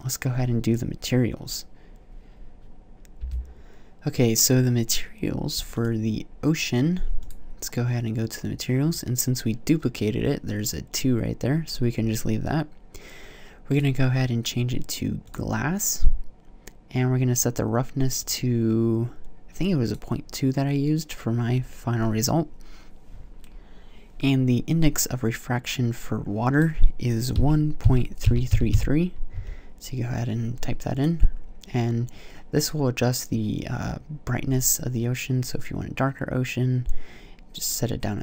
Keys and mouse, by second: 28.3 KP_3.